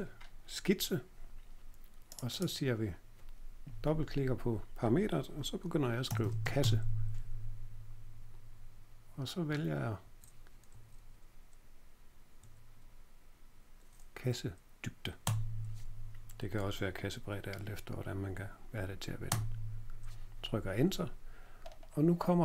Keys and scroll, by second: 5.8-7.1 typing, 9.4 Down, 10.0 Down, 10.7 Page_Down, 12.3 Up, 15.2 Return, 19.2 Return.